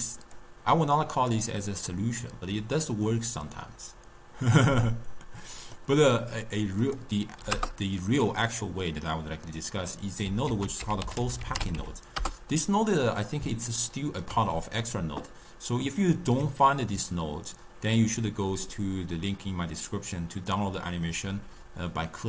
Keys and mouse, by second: 0.4-3.1 drag, 3.1-6.2 middle drag, 6.9-8.9 drag, 8.9-10.5 middle drag, 10.5 ctrl+a, 13.7-16.8 ctrl+middle drag.